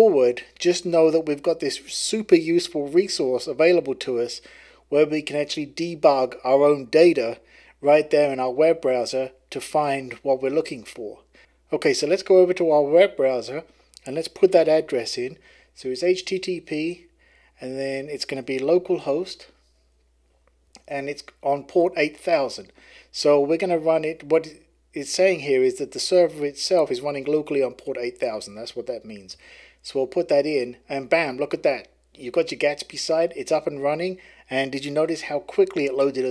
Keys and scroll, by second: 14.4-19.1 typing, 20.6 Tab, 29.3 Return.